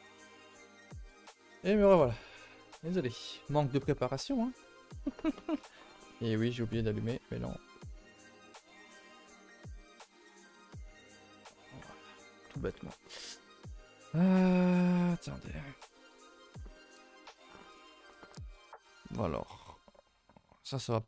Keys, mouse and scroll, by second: 19.7-20.8 scroll up 1, 20.8-21.0 scroll up 1.